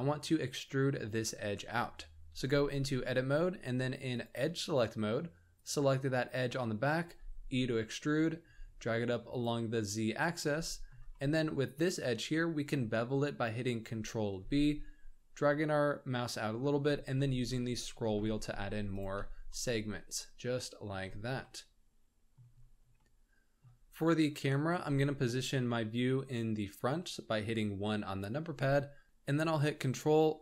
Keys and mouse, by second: 2.6 middle click, 4.1 click, 5.6 click, 7.0 e, 9.8-10.5 drag, 10.7 shift+click, 11.2 drag, 14.4 ctrl+b, 19.1 Tab, 19.5-20.9 middle drag, 21.4-22.4 middle drag, 23.0-23.6 shift+middle drag, 27.4 KP_1.